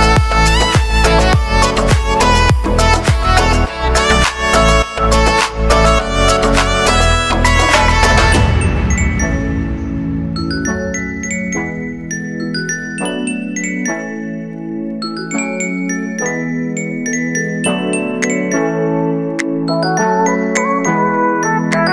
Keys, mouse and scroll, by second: 0.5 click, 0.9-1.4 typing, 1.9 click, 2.8 ctrl+a, 3.8 ctrl+shift+c, 4.4-5.5 typing, 5.8 Return, 8.1 click, 8.8 space, 12.1 space, 13.2-14.6 drag, 15.3 ctrl+d, 16.0 click, 16.9 s, 17.7 click, 19.6 -, 20.6 Return.